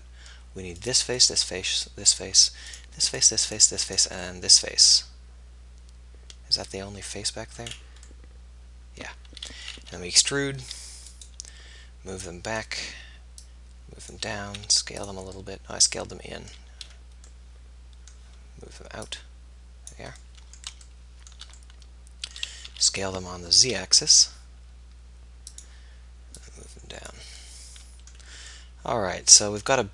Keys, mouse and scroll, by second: 1.5 click, 1.9-5.2 middle drag, 5.2 click, 5.7 middle click, 7.3 middle click, 7.6 middle click, 7.8 middle click, 10.7 e, 14.6 s, 19.0-20.0 drag, 21.3 middle click, 22.1 middle click, 22.7 s, 25.5 click, 27.5 middle click, 28.6 middle click, 29.3-29.9 middle drag.